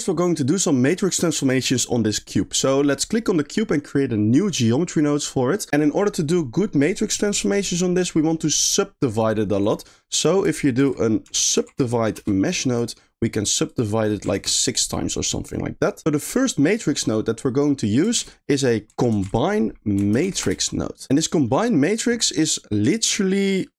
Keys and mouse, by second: 1.5 click, 4.5 click, 5.4 middle click, 8.6 click, 9.7 click, 10.1 click, 10.8 shift+a, 13.8 click, 17.7 middle click, 18.2 shift+a, 21.2 drag, 21.6 middle click, 22.4 middle click, 23.0 click.